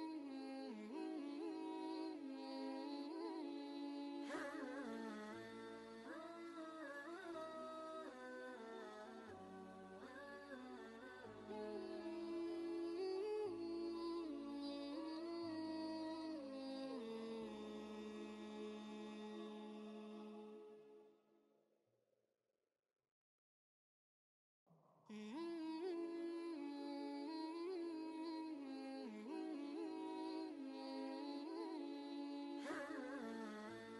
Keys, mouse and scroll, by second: 0.5 click, 0.8 space, 6.9 click, 8.1 Return, 9.3 click, 11.8 Return, 13.0 click, 14.7 ctrl+space, 14.8 ctrl+click, 15.2 ctrl+space, 16.2-16.7 typing, 16.4 click, 17.3 ctrl+click, 17.7 ctrl+space, 18.3 click, 18.8 space, 19.1 ctrl+click, 19.5 ctrl+space, 20.0 click, 21.0 space, 21.2 click, 21.7 ctrl+space, 21.8-23.3 ctrl+drag, 23.3 space, 23.4 click, 23.8 space, 24.4-26.3 drag, 26.3-26.9 typing, 26.6 click, 27.2 ctrl+click, 27.6 ctrl+space, 30.0-31.7 shift+drag, 31.7 space, 31.9 click, 32.3 space, 32.8 click, 33.2 space, 33.4 click, 33.7 space.